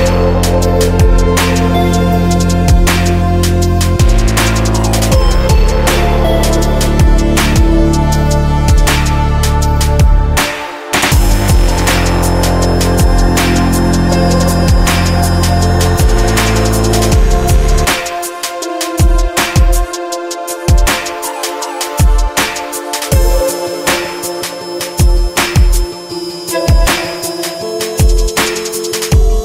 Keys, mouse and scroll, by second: 0.4 click, 1.1 click, 1.3 click, 5.0-6.3 drag, 6.3 right click, 7.4 click, 8.3 click, 9.0 click, 9.4 click, 10.6 middle click, 11.1 click, 14.5 middle click, 14.7 middle click, 15.4 click, 16.1 middle click, 16.3-19.5 drag, 20.1 KP_0, 22.4-23.6 drag, 24.0 KP_0, 26.8-28.7 drag.